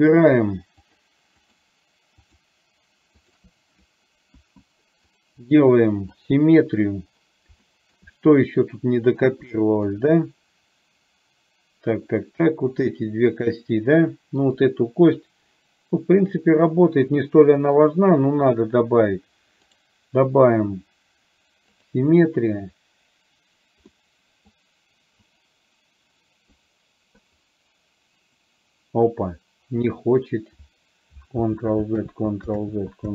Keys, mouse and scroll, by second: 0.9 click, 1.5 shift+click, 2.3 shift+click, 3.3 shift+click, 5.3-6.4 right drag, 7.8 shift+middle click, 8.2 middle click, 9.7 shift+middle click, 14.7 click, 19.8-22.0 right drag, 24.0 middle click, 25.3 click, 26.7 right click, 32.2 ctrl+z.